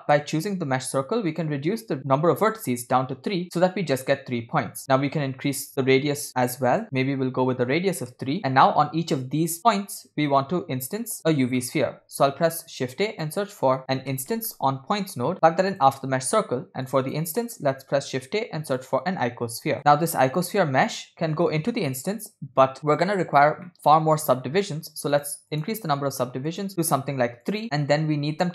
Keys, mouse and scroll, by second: 0.7-1.3 scroll up 2, 1.3-2.9 drag, 4.9-7.6 drag, 11.4 scroll down 2, 11.6 middle click, 12.4 shift+a, 16.9 click, 17.4 middle click, 18.1 shift+a, 21.0 drag, 21.2-22.2 drag, 22.8 middle click, 23.7 middle click, 24.1-25.1 scroll up 3, 25.1 scroll up 3, 25.2 click, 25.5 click, 26.5 click, 27.5 click, 28.4 shift+a.